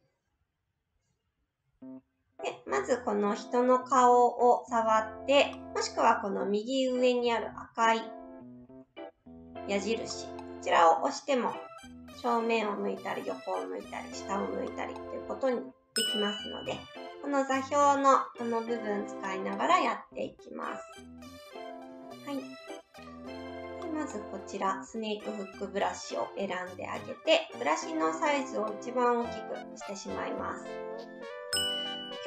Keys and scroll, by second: 21.5 ctrl+z, 21.9 ctrl+z.